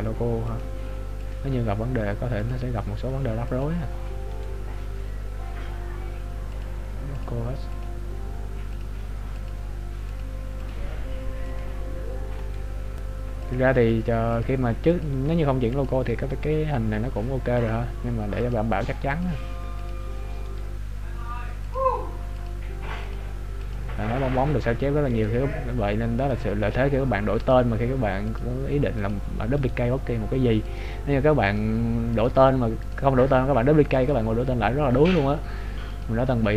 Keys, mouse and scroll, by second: 4.4 right click, 6.1-6.6 scroll up 2, 6.6 click, 12.7 right click, 13.7 click, 16.6 right click, 17.7 click, 20.7 right click, 21.7 click, 25.3 right click, 30.0 right click, 30.8 click, 34.2 right click, 35.1 click.